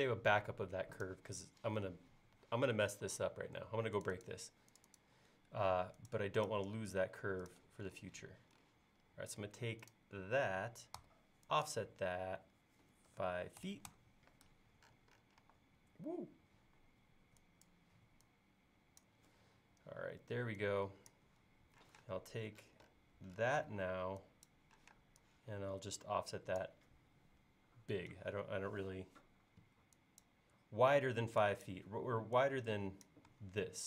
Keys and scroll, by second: 3.3 space, 11.0 f, 13.1-15.5 typing, 21.9 p, 23.7 e, 24.9 p, 28.8 e.